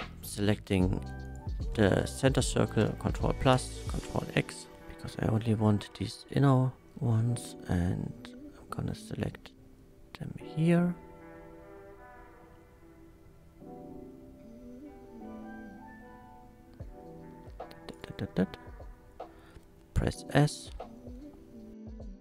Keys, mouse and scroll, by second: 1.2 click, 2.8 ctrl+KP_Add, 3.5 ctrl+x, 4.5 1, 5.3 shift+middle click, 6.7 c, 6.9 middle click, 7.7-9.9 drag, 16.0-17.9 drag, 17.9 right click, 18.4 s.